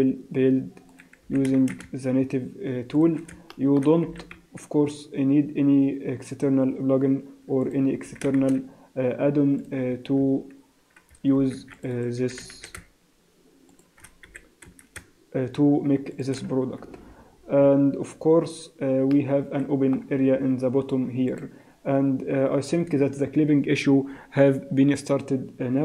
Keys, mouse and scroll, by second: 1.2 s, 3.5 shift+middle click, 4.1 e, 8.0 s, 10.0 Tab, 10.2 Tab, 11.3 ctrl+r, 12.2 s, 14.3 s, 16.6 Tab, 16.9-17.3 scroll down 2, 17.3-17.7 scroll up 2, 17.7 Tab, 18.1-19.1 scroll up 1, 19.1 middle click, 20.3 z, 22.8 n.